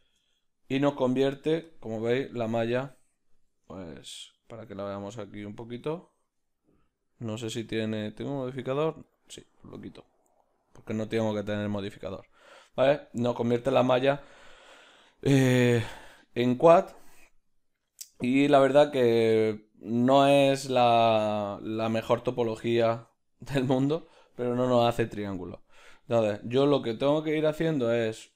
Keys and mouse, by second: 3.9 Tab, 9.1-13.1 drag, 13.1-28.3 middle drag, 20.3 z.